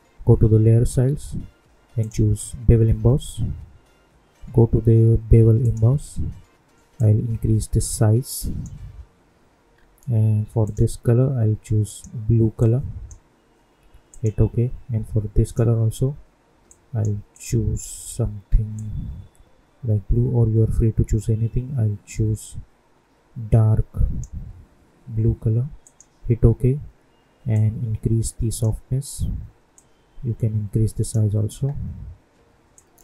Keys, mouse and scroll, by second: 1.9 click, 5.5-9.7 drag, 9.7-10.2 scroll down 1, 10.6-25.8 drag, 27.5-33.0 drag.